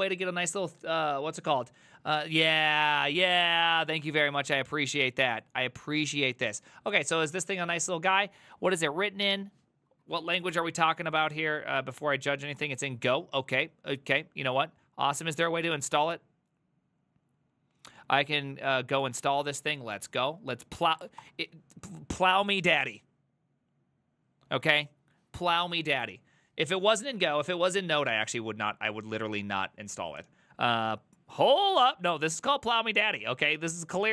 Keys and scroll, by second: 10.2 alt+f, 20.0 ctrl+c, 20.3 alt+{, 21.0 ctrl+v, 21.2 Return, 27.0 alt+f.